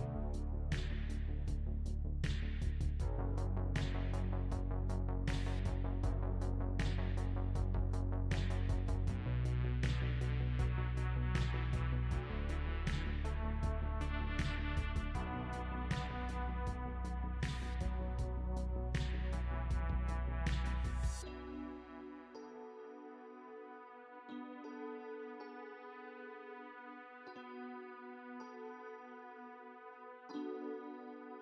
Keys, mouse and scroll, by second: 0.2 Tab, 0.8 click, 1.1 click, 1.2 Tab, 1.2 middle click, 6.6 Tab, 8.4 a, 15.4 Tab, 18.7 click, 23.2 click, 23.8 click, 25.5 click, 26.0 middle click, 27.8-28.2 scroll up 2, 28.2 middle click.